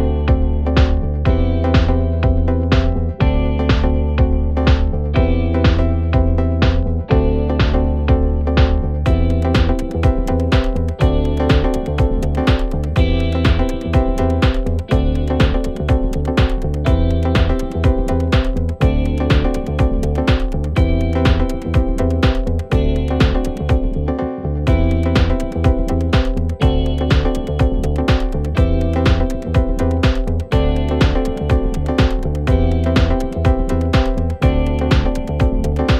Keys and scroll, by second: 2.9 Delete, 5.2 ], 14.0 [, 27.8 ], 30.0 4, 31.0 ctrl+z, 31.5 5, 35.7 3.